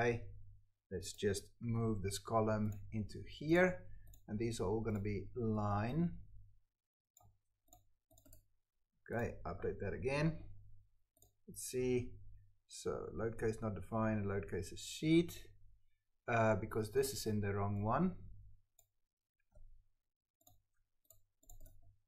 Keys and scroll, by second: 1.6 ctrl+x, 3.0 ctrl+v, 5.5 ctrl+c, 7.3 ctrl+v, 19.3 ctrl+x, 20.6 ctrl+v.